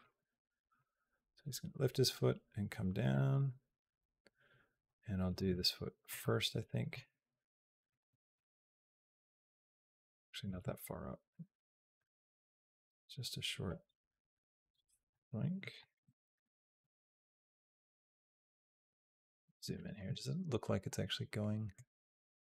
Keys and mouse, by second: 0.6-4.7 drag, 5.0 click, 5.3 g, 6.6 click, 6.8 g, 8.2-10.0 drag, 10.3 g, 11.8-15.0 drag, 15.2 middle click, 15.9 shift+middle click, 16.7 shift+middle click, 17.6 shift+middle click, 18.7 KP_Decimal, 19.5 shift+middle click, 19.9 middle click, 21.6-22.4 drag.